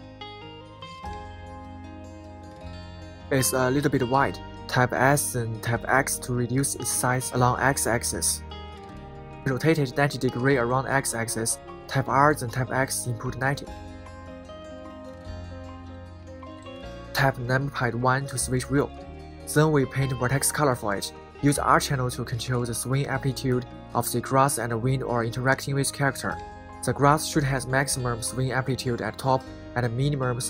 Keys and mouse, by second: 2.5 a, 3.9 s, 4.2 x, 6.2 click, 7.3 Tab, 8.6-9.5 middle drag, 10.6-11.3 middle drag, 11.5-12.1 middle drag, 12.4 middle click, 13.2 r, 13.6 x, 14.2 9, 14.3 0, 14.8 Return, 15.4-16.2 middle drag, 16.7 KP_1.